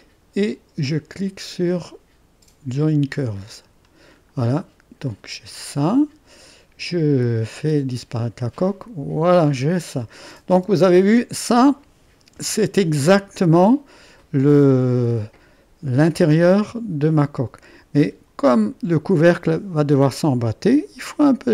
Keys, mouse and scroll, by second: 2.8-3.8 drag, 3.8-5.0 scroll down 1, 5.0-7.5 drag, 7.5 space, 8.5-10.5 drag, 10.5 space, 12.3 space, 12.9 click, 14.2 click, 14.7-15.9 middle drag, 18.6-20.5 scroll up 1.